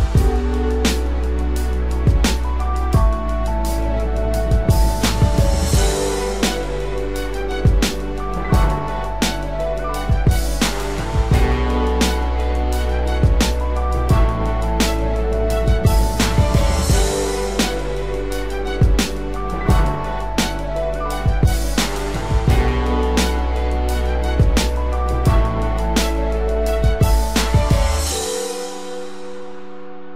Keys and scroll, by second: 6.5 ctrl+=, 7.1 ctrl+=, 14.3 ctrl+-.